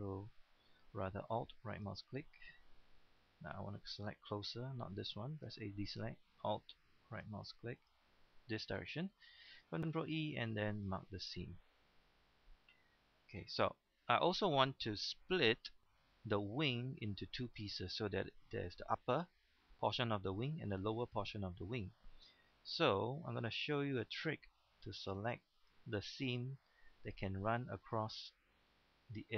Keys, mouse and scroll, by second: 1.7 alt+right click, 2.3 middle click, 2.9-3.4 scroll up 1, 3.4-4.1 ctrl+scroll down 1, 4.1 scroll down 1, 4.3-5.5 scroll up 1, 5.5 a, 7.1 alt+right click, 8.6 ctrl+scroll down 1, 8.8 ctrl+middle click, 10.1 ctrl+e, 10.8 click, 11.4 middle click, 12.6 shift+middle click, 13.1 scroll down 1, 13.7 middle click, 16.3-16.7 scroll up 1, 16.7 middle click, 17.7 shift+middle click, 19.5 scroll down 1, 19.7-22.1 middle drag, 22.1-22.5 scroll up 1, 22.8 shift+middle click, 23.4 scroll down 1, 23.7 middle click, 24.7-25.0 scroll up 1, 25.5 right click, 26.4-27.0 scroll down 1, 27.0 middle click, 27.7-28.0 scroll down 1, 28.0 middle click, 28.9 scroll up 1.